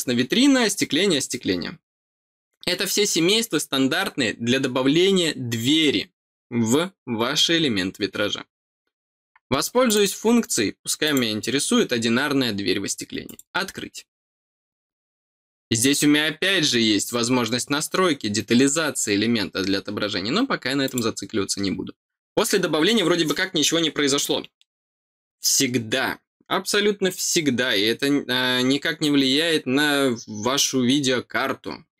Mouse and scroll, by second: 9.8 click, 11.0 click, 13.2 click, 19.2 middle click, 20.8 click.